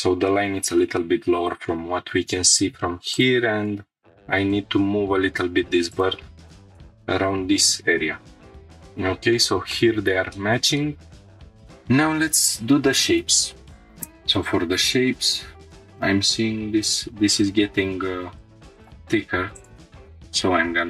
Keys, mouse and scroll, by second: 0.3-0.7 scroll up 3, 1.0 shift+middle click, 1.7-2.1 scroll up 2, 2.5 1, 3.1-3.9 drag, 3.9 g, 4.5 x, 5.9 shift+click, 6.2-6.6 scroll down 4, 6.7-7.1 shift+middle drag, 7.8 scroll down 2, 8.1 scroll up 2, 8.6 middle click, 8.6-8.9 scroll down 1, 9.2 scroll down 2, 9.7 middle click, 10.3 shift+middle click, 10.8 middle click, 11.4 click, 11.4 scroll up 1, 15.2-15.5 scroll down 3, 15.5 shift+middle click, 15.6 scroll up 3, 17.2 scroll up 1, 18.4 click, 18.6 g, 18.6 z, 18.7-19.8 drag, 19.9 g, 20.1 z.